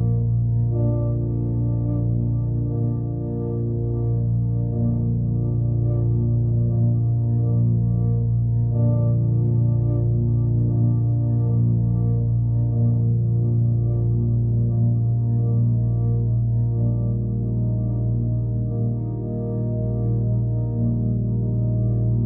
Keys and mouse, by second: 1.2 click, 3.1 click, 4.0 KP_0, 5.2-6.0 alt+middle drag, 8.2-10.6 shift+drag, 11.2-13.5 drag, 14.2 middle drag, 14.6-15.4 alt+middle drag, 15.7 middle drag, 16.0-16.4 alt+middle drag, 17.4-18.7 shift+drag, 18.9-19.3 alt+middle drag, 19.5 middle click, 19.8 alt+middle click, 21.4-22.2 drag.